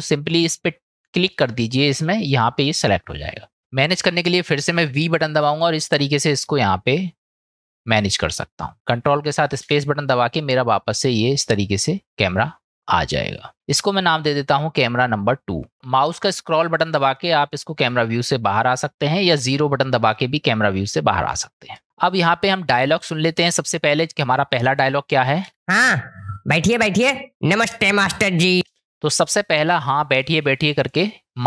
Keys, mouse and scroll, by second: 9.6 ctrl+space, 14.1 click, 14.3-15.7 drag, 17.1-18.0 middle drag, 18.8-19.4 middle drag, 20.2-21.1 middle drag, 23.8 click, 25.5 space, 28.6 space, 29.5 click.